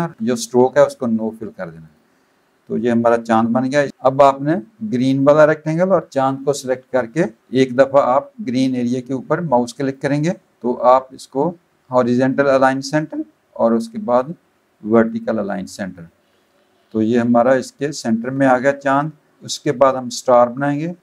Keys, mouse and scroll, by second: 1.2 click, 1.8 click, 3.8 shift+click, 4.7 click, 7.4 click, 9.8 click, 12.5 click, 15.0 click, 15.9 click, 19.3 click.